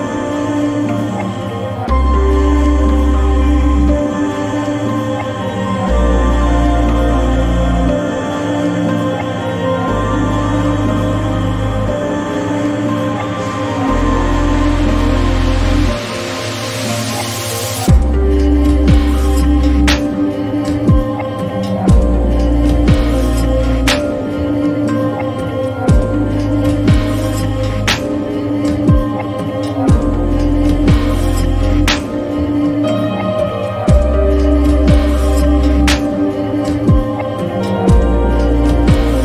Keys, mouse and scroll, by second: 3.2 click, 6.0 click, 9.5 click, 9.6-13.6 drag, 15.6 click, 15.6-17.9 drag, 19.7-26.6 drag, 28.1-30.7 drag, 32.4 click, 34.2 click, 35.4 scroll down 1, 37.5-39.2 drag.